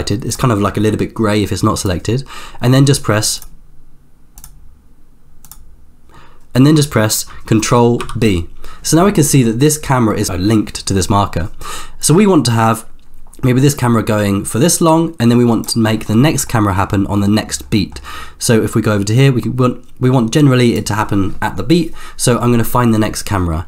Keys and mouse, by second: 4.6 click, 8.2 ctrl+b, 12.0-15.9 drag, 16.4 middle click, 17.3 middle drag, 17.9 middle click, 18.4-21.0 drag.